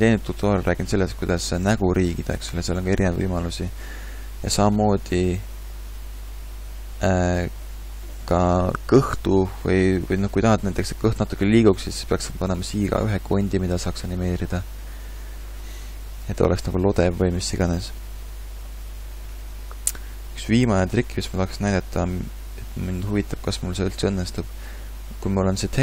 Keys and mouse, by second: 6.1-10.0 middle drag, 15.9-17.4 middle drag, 17.9 middle click, 22.4-25.8 drag.